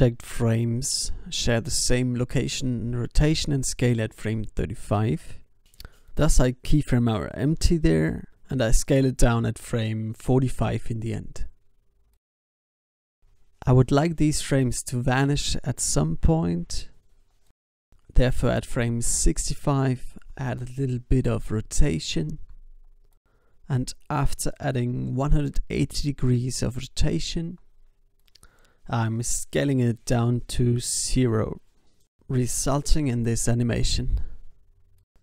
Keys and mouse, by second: 0.7 i, 1.5-2.6 drag, 2.6 s, 3.5-5.4 drag, 4.7 i, 5.6 alt+a, 8.6 alt+a, 9.2 ctrl+s, 11.6 g, 12.9 alt+a, 13.9 alt+a, 14.1 ctrl+s, 14.7 alt+a, 16.9 alt+a, 17.0 ctrl+s, 22.1 r, 25.1 i, 26.5 click, 26.8 alt+a, 27.7 alt+a, 28.9 s, 30.5 i, 31.7 alt+a, 35.0 alt+a.